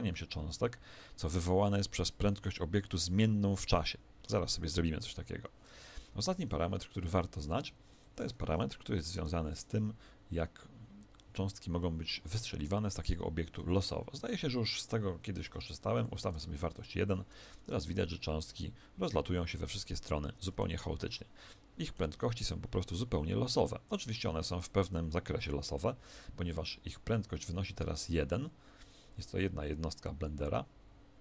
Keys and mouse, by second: 6.0 Escape, 7.1-9.7 drag, 17.5 alt+a, 18.5-20.8 middle drag, 20.8 z, 21.1-31.2 middle drag.